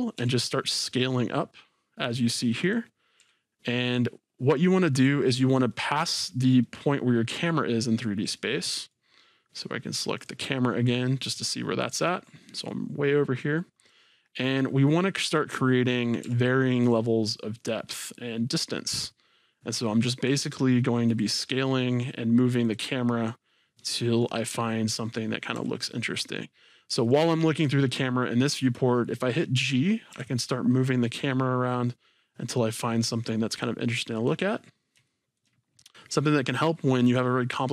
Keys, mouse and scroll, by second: 0.2 s, 2.7 click, 3.2 s, 5.0 middle click, 5.0 click, 6.1-10.2 middle drag, 7.7-8.1 scroll down 2, 10.2 click, 10.9-11.3 scroll up 2, 11.3-15.2 middle drag, 12.9-13.5 scroll up 2, 13.5-13.9 scroll down 2, 15.2 click, 16.2 s, 21.1-22.8 drag, 23.6 click, 24.1-25.6 middle drag, 25.6 g, 26.0-27.2 middle drag, 27.2-32.1 right drag, 30.1 g, 32.1-34.2 middle drag, 34.3 click, 34.6-35.1 scroll, 35.1 shift+middle click, 35.7-37.2 scroll down 2, 37.2-37.7 scroll down 1.